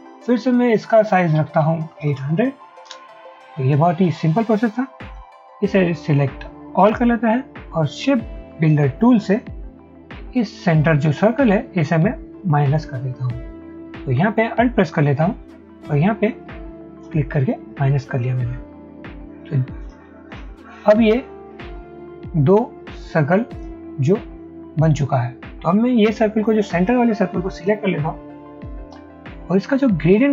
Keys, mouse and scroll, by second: 1.5-2.7 typing, 3.0 Return, 9.3 m, 17.1 alt+click, 20.4 double click.